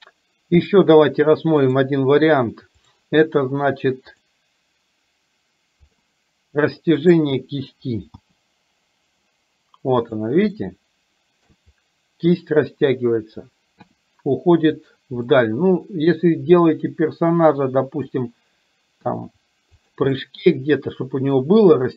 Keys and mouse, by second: 1.7 click, 4.3-6.1 drag, 7.1 click, 8.2 g, 10.6-11.6 shift+middle drag, 14.0 r, 15.3-18.2 middle drag, 19.2 r, 20.3-21.5 middle drag.